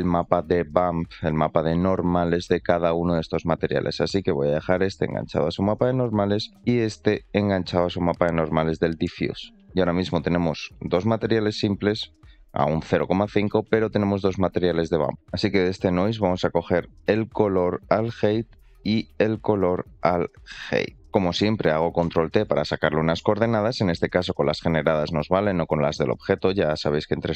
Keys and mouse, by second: 3.8 middle click, 4.6-5.4 drag, 5.6 click, 6.5 shift+d, 7.2 click, 8.2 click, 10.2 click, 12.6 middle click, 13.3 middle click, 15.1 click, 15.1 middle click, 15.6 click, 17.3-18.3 drag, 18.9-20.9 drag, 22.6 shift+middle click, 25.7 click.